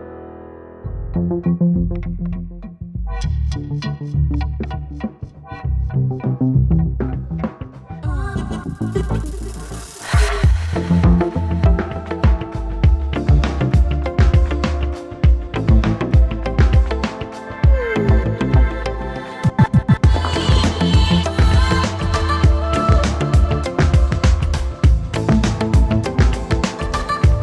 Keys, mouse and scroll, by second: 4.8 shift+click, 11.7 ctrl+a, 12.4 ctrl+click, 18.3 0, 24.4 0.